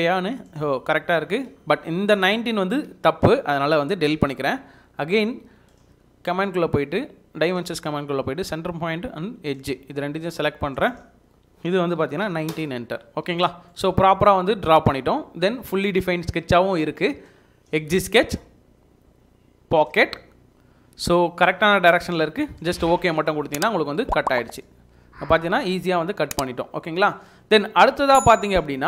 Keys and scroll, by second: 1.2 Escape, 4.1 Delete, 11.9 typing, 12.5 Return, 13.1 Escape.